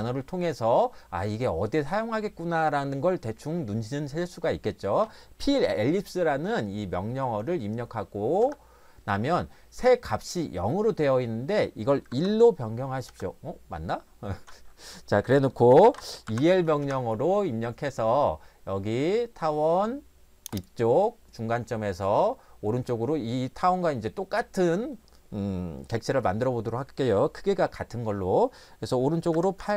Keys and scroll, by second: 8.4 Return, 12.1 1, 13.1 Return, 15.9 e, 16.3 l, 16.8 Return, 29.1-29.7 typing.